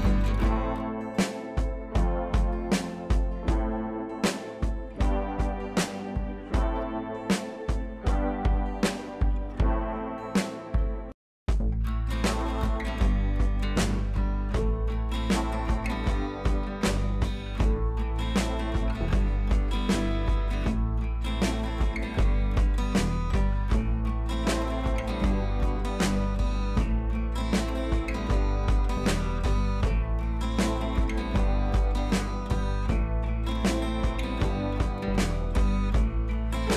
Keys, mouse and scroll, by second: 1.5 scroll up 1, 3.0 scroll down 1, 4.6 click, 7.1-11.4 drag, 17.4-19.8 drag, 24.6-26.1 drag, 26.8-30.0 drag, 32.6-36.0 drag.